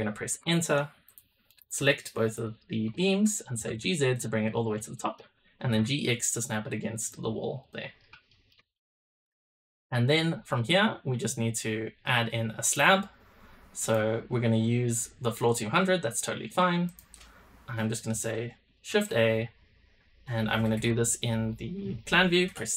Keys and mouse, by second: 0.9 click, 2.3 shift+click, 2.8-3.2 middle drag, 3.5 g, 4.4 middle drag, 4.9 shift+middle click, 5.5 g, 7.5 click, 8.2 shift+click, 8.7 drag, 12.6 click, 18.8 shift+a, 22.4 KP_7.